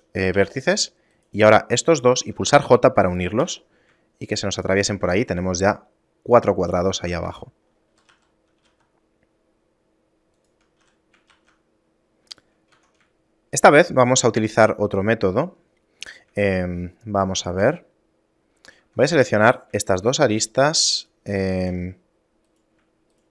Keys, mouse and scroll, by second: 0.4 j, 1.2 right click, 2.0 shift+right click, 3.5 j, 4.2 shift+middle click, 5.2 right click, 5.7 shift+middle click, 7.3 Tab, 7.6 scroll down 5, 8.0 a, 8.2 a, 8.7 g, 10.9 a, 12.8 Tab, 13.3 shift+middle click, 13.8 scroll up 1, 14.8 scroll up 2, 16.6 shift+middle click, 18.8 ctrl+Tab, 19.5 right click, 21.0 shift+right click, 22.5 right click, 23.2 shift+right click.